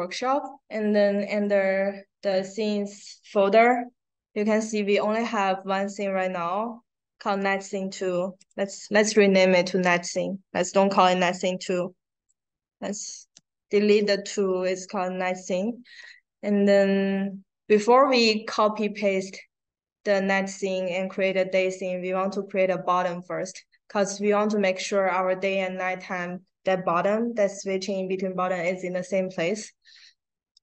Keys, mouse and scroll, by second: 1.1 click, 1.3 click, 8.3 right click, 9.7 click, 10.9 click, 11.6 click, 14.0-14.4 drag.